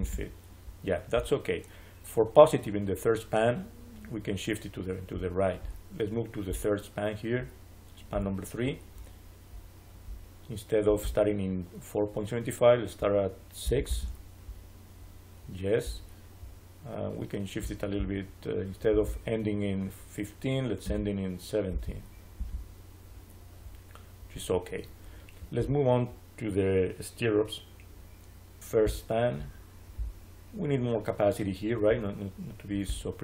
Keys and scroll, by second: 13.5 6, 13.8 Return, 20.7 1, 21.6 7, 22.3 Return.